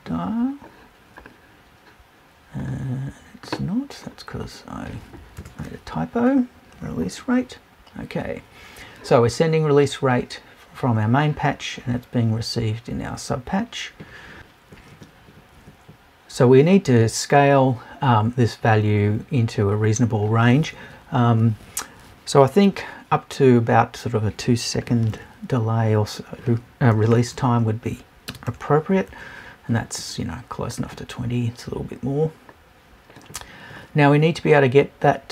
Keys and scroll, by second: 5.4 BackSpace.